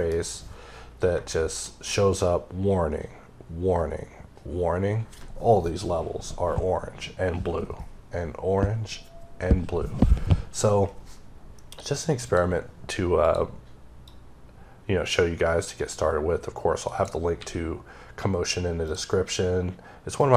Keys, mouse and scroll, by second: 12.1 click, 13.1 click, 13.9 click, 17.3 x, 18.7 click, 20.1 click.